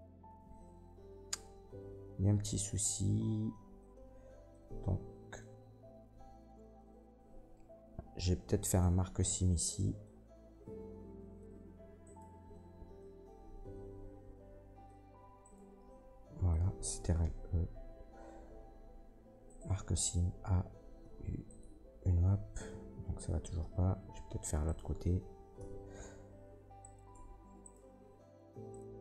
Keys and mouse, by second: 8.7 alt+click, 8.7 alt+middle click, 8.7 alt+right click, 9.0-24.1 alt+drag, 12.0 middle click, 12.0 right click, 15.4 ctrl+middle click, 15.4 ctrl+right click, 17.2 ctrl+e, 20.0 a, 21.0 u, 24.4 Tab, 24.6-26.8 drag, 24.6 middle click, 24.6 right click, 25.6 h, 26.3 Tab, 26.8 middle click, 27.0 click, 27.1 Tab, 27.6 middle click, 27.7 click, 28.7 ctrl+click, 28.7 ctrl+middle click, 28.7 ctrl+right click, 28.9-29.0 ctrl+drag.